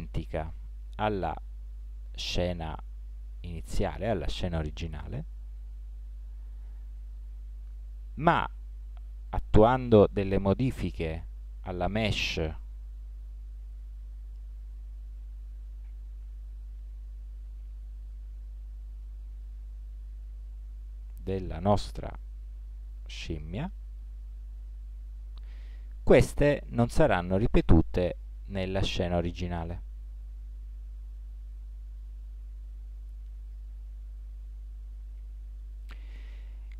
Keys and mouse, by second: 10.9 Tab, 13.9 a, 16.2 a, 17.4 s, 21.6-23.6 drag, 24.4 Tab, 30.4 KP_1, 31.9-33.2 drag.